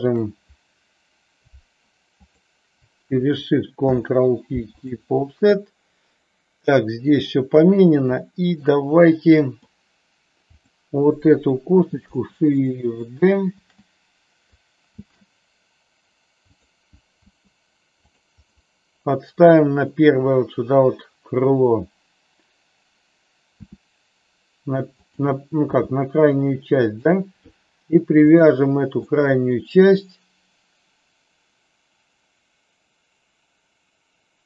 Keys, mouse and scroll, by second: 0.0 shift+click, 2.2 shift+click, 3.8 ctrl+p, 8.2 middle click, 9.4 middle click, 10.5 click, 13.5 shift+s, 14.9 shift+d, 16.4 click, 17.3 r, 17.9 click, 18.5-19.8 middle drag, 23.5 r, 25.0 click, 25.6 g, 26.8 click, 28.4 middle click.